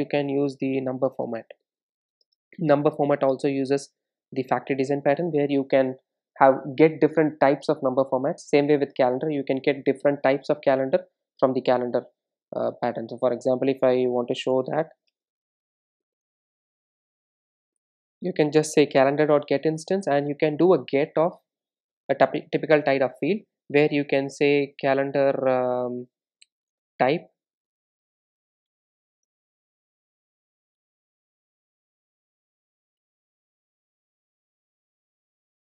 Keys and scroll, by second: 19.9 Return.